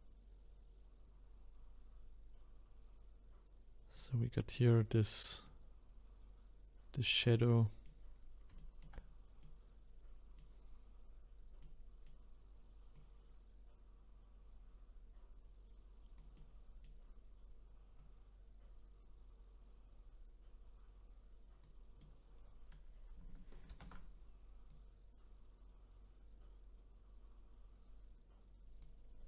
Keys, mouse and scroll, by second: 4.8-5.4 scroll down 2, 5.4-8.1 middle drag, 8.1-8.6 scroll up 1, 8.6 shift+middle click, 9.0-9.4 scroll up 2, 9.4-12.9 middle drag, 12.9-16.0 drag, 16.3-18.0 middle drag, 18.0-21.0 drag, 22.0-23.7 middle drag, 23.7 ctrl+z, 24.7-27.7 drag.